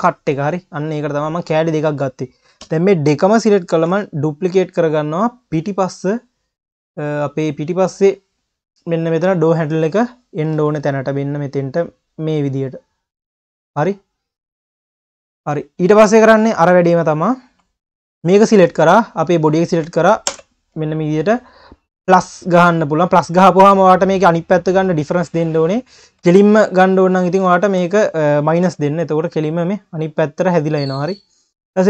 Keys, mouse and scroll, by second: 0.0 KP_3, 1.0 q, 1.7 shift+click, 2.6 KP_3, 3.3-3.7 scroll down 6, 3.7 shift+d, 4.3 click, 5.9 drag, 6.2-7.2 scroll up 1, 8.4-9.3 drag, 14.2 click, 14.5-14.8 scroll down 5, 15.2 q, 16.2 click, 16.6 ctrl+s, 16.7 click, 17.0 scroll up 2, 17.3 q, 18.2 click, 18.9 shift+click, 20.3 ctrl+KP_Add, 22.1 click, 22.8-23.7 scroll up 3, 23.7 scroll down 2, 24.9 click, 25.4 scroll down 2, 25.7 q, 26.8 click, 27.6 shift+click, 28.5 ctrl+KP_Subtract, 29.4 scroll up 2, 29.7 q, 31.6 scroll down 1.